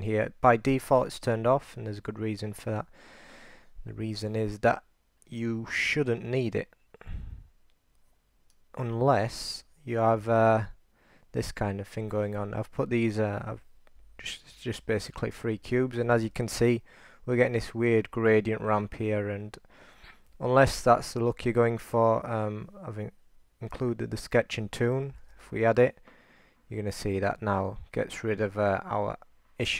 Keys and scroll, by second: 10.3 alt+super+r, 14.2-15.9 3, 16.2 r, 25.3 super+r.